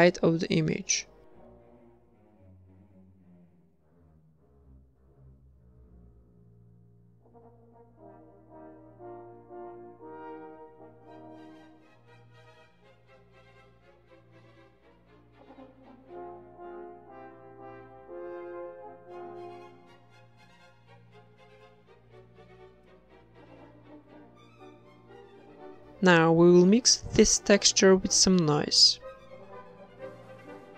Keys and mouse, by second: 1.3 ctrl+r, 1.8 right click, 2.2 ctrl+r, 3.5 a, 3.7 a, 3.9 a, 4.1 right click, 4.6 g, 6.4 a, 6.5-7.6 right drag, 7.0 g, 7.8 Tab, 8.4 Tab, 8.8 click, 9.5 Tab, 9.9-11.0 right drag, 10.4 Tab, 10.8 a, 11.0 a, 11.3 u, 13.0 s, 13.6 g, 14.2 Tab, 16.5 KP_0, 16.9 z, 17.4 ctrl+s, 18.5 click, 19.8 shift+a, 21.9-23.3 drag, 24.9 click, 25.9 middle click, 25.9 a, 26.1 b, 26.3 g, 27.1 g, 28.1 click, 28.3 g, 29.5-30.6 drag, 30.1 shift+d.